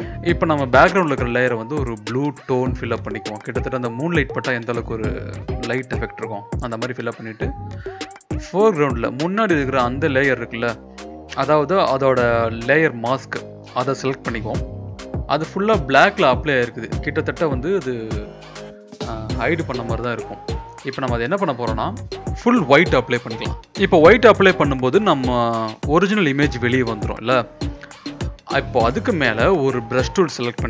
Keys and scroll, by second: 0.1 ctrl+b, 14.9 b, 16.0-17.2 typing, 25.2 ctrl+BackSpace.